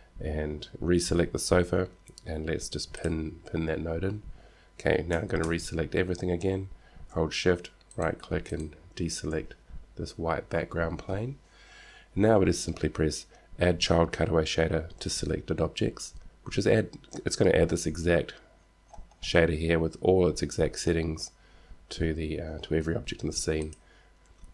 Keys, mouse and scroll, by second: 1.4 click, 3.2-5.0 drag, 5.5 a, 5.7 a, 8.0-10.5 drag, 21.3-23.4 middle drag, 23.8-24.5 drag.